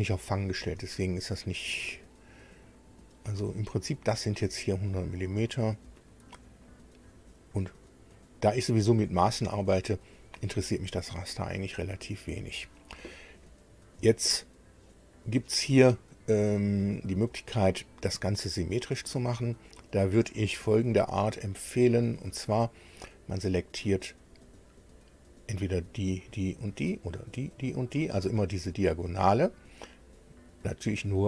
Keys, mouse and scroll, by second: 1.2-1.6 scroll down 1, 1.9 scroll down 2, 2.6 scroll up 2, 6.6 right click, 7.8-8.2 scroll up 2, 24.1 click.